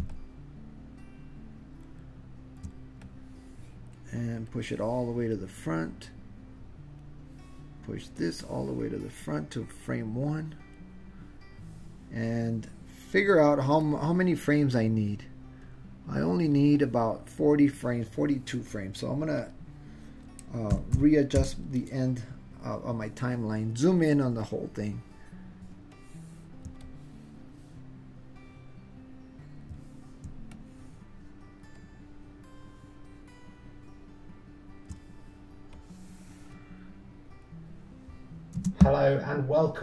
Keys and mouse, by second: 0.2-1.9 ctrl+middle drag, 3.0 middle click, 4.5-7.2 drag, 8.2-11.0 drag, 13.9-16.4 drag, 19.5-22.3 drag, 25.8 middle click, 26.9 ctrl+middle click, 27.1-29.7 ctrl+drag, 30.4-31.4 ctrl+middle drag, 31.8-34.9 ctrl+middle drag, 35.9-37.6 drag, 38.6 space.